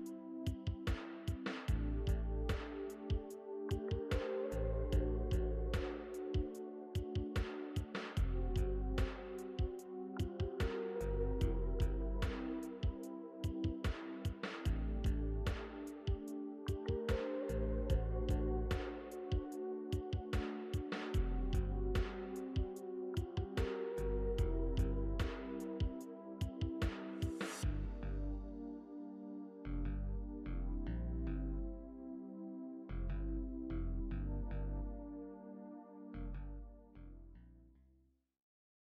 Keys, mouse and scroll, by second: 7.8 ctrl+t.